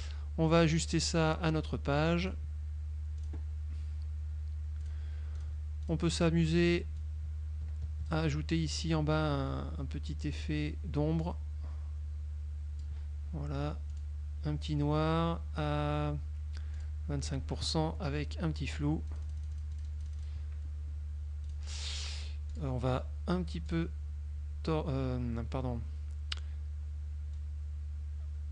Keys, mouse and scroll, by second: 1.1 click, 2.3 click, 3.4 click, 5.0 click, 5.5 click, 6.0 click, 6.6 click, 7.1-8.4 drag, 10.4 click, 11.4-13.1 drag, 14.0 click, 16.0 right click, 16.9 click, 19.2-20.6 drag, 21.6 click, 22.6 click, 23.8 click, 27.4-28.5 drag.